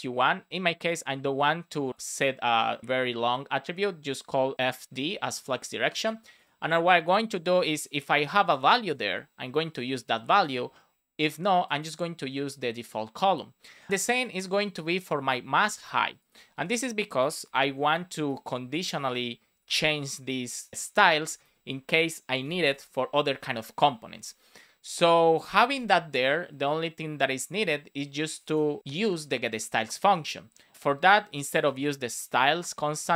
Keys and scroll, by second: 8.8 space, 15.5 super+c, 16.5 super+v, 17.1 space, 17.5 shift+/, 17.5 Left, 18.2 BackSpace, 20.2 BackSpace, 20.7 super+s, 21.2 Right, 21.7 BackSpace, 22.3 space, 22.6 shift+\, 23.3 super+s, 28.9 super+c.